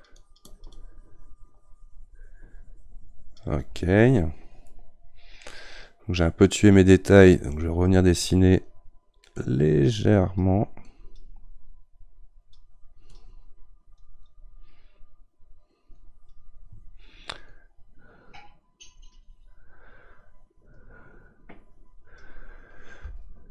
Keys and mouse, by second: 4.6-7.2 middle drag, 7.2-10.1 drag, 10.1-13.1 right drag, 13.1-23.5 drag.